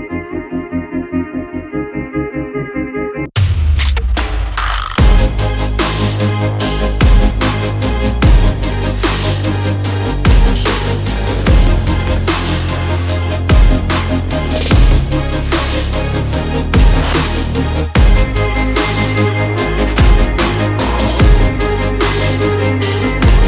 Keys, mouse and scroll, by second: 3.6 shift+z, 12.0 shift+z, 14.9 middle click, 16.5-17.8 middle drag, 18.1 shift+z.